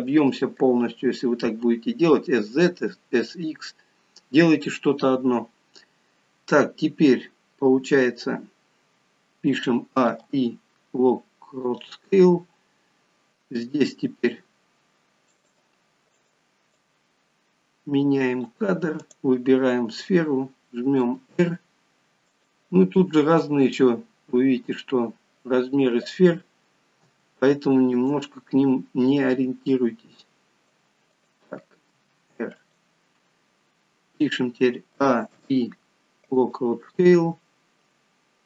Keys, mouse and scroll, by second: 9.6 a, 13.8 r, 16.2 click, 16.8 click, 20.9 r, 35.0 a, 37.6-38.0 scroll down 3, 38.3 scroll up 2.